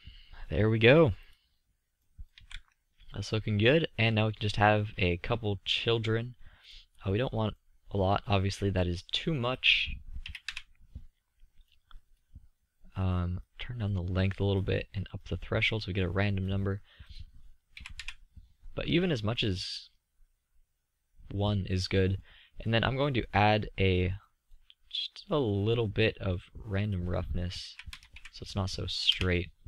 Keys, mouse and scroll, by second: 1.5 drag, 3.8 z, 4.8-6.0 middle drag, 8.0 middle click, 8.4-9.8 drag, 10.9-12.7 middle drag, 13.5-22.7 middle drag, 24.7-28.3 middle drag.